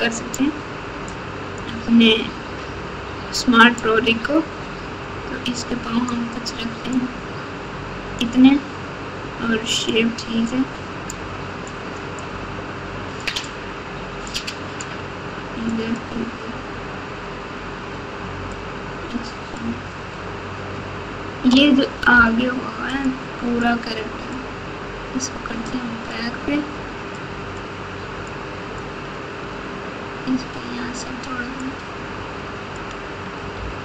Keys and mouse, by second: 1.0 click, 3.7-6.1 drag, 6.9-8.2 drag, 9.9 click, 11.1 click, 12.2-13.2 drag, 14.4 click, 15.7 click, 18.5-19.5 drag, 22.1 f, 23.8 click, 25.6 click, 27.1 click, 28.4 click, 31.6-32.7 drag, 33.5 f.